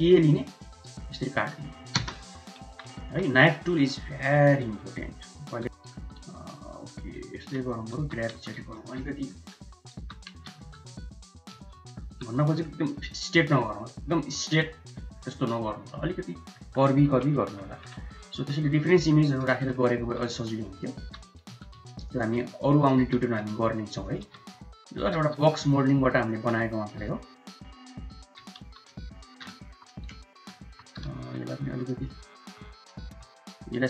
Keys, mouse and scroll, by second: 2.3 middle click, 2.8 2, 3.4 middle click, 3.8 s, 5.6 ctrl+z, 6.2 ctrl+z, 6.4 middle click, 7.1 shift+middle click, 7.6 middle click, 7.8 g, 8.9 middle click, 9.9 g, 11.6 middle click, 11.9 Tab, 12.2 middle click, 15.0-16.3 middle drag, 16.8 KP_1, 17.2 KP_3, 18.1 Tab, 18.7 shift+click, 19.3 shift+z, 19.9 1, 20.1 click, 20.9 g, 22.4 click, 22.9 g, 24.4 click, 25.2 g, 26.9 click, 28.1 g, 29.4 Tab, 30.4 Tab, 30.9 shift+z, 31.3 click, 32.2 Tab, 32.9 Tab, 33.4 click.